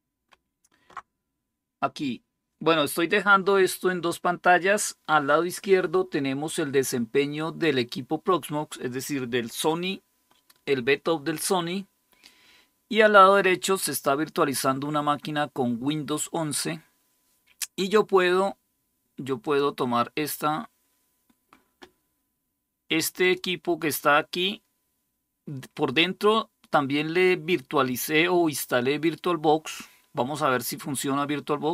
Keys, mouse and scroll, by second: 19.2 click, 22.9-31.7 drag.